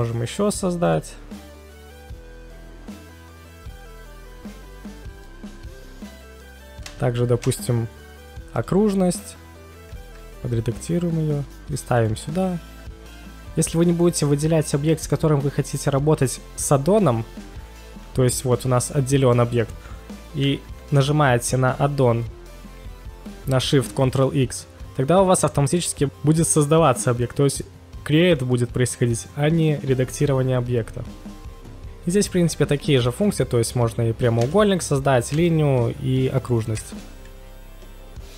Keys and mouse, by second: 1.9-2.3 middle drag, 2.6 KP_1, 3.1 ctrl+shift+x, 4.3 ctrl+shift+c, 4.9 ctrl+shift+x, 18.2 click, 20.7 ctrl+shift+x.